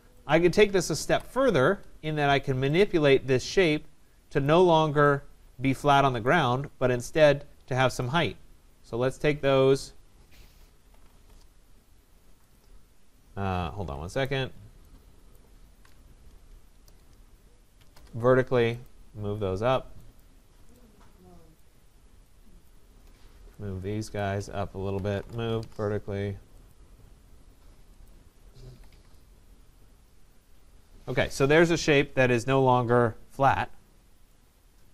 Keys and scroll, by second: 1.1 Delete, 11.2 Return, 13.6 Escape, 16.8 Return, 25.3 Return, 28.7 Escape.